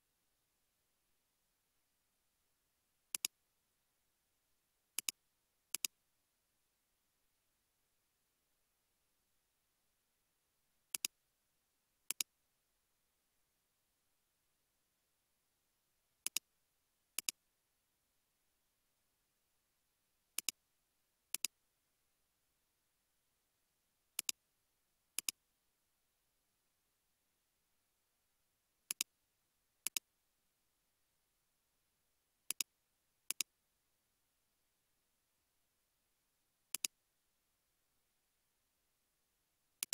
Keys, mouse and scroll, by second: 0.3 scroll up 1, 1.1 typing, 9.1 typing, 14.8 typing, 19.6 typing, 23.2 typing, 27.6 typing, 31.5-32.2 typing.